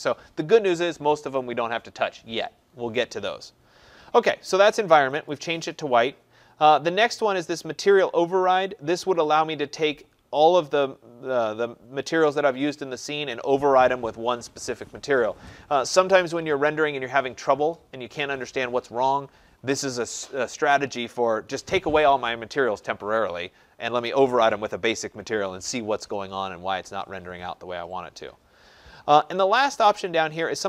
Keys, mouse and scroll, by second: 5.3-10.4 drag.